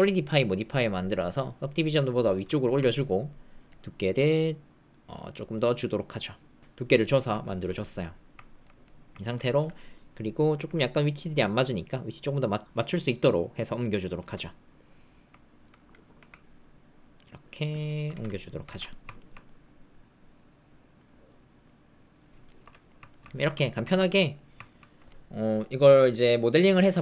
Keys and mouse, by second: 0.3 middle click, 1.1 click, 2.1 middle click, 2.5 ctrl+middle click, 3.8-6.1 shift+drag, 7.4 ctrl+middle click, 7.7 middle click, 8.8 middle click, 10.5 g, 14.2-15.6 middle drag, 16.1 g, 18.1 alt+z, 18.6 alt+z, 18.9 click, 19.1 ctrl+click, 19.4-21.6 drag, 22.2 click, 22.4 shift+click, 22.7 ctrl+click, 23.1 ctrl+click, 23.2 middle click, 23.3 shift+middle click, 23.5 middle click, 23.9 ctrl+middle click, 24.1 middle click, 24.6 ctrl+middle click.